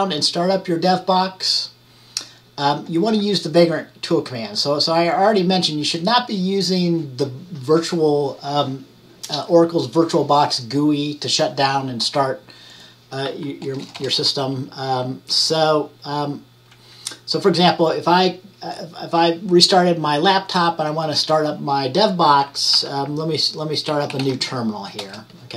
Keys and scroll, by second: 22.8-24.8 typing.